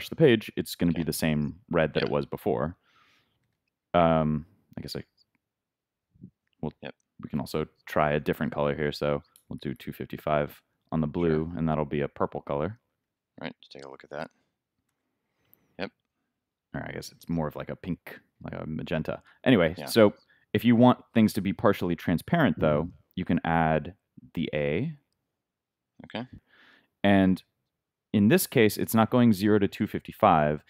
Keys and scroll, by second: 1.3 super+s, 3.4 super+r, 5.0 super+Tab, 12.9 super+s, 14.9 super+r, 17.3 super+Tab.